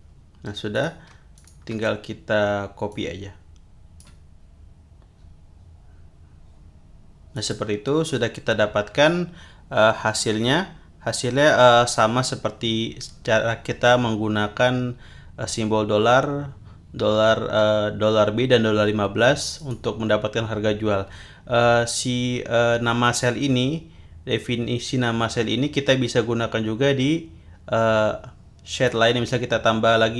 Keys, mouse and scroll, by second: 0.7 click, 1.3 shift+click, 2.9-4.2 drag, 7.3 click, 19.6 click, 28.7 click.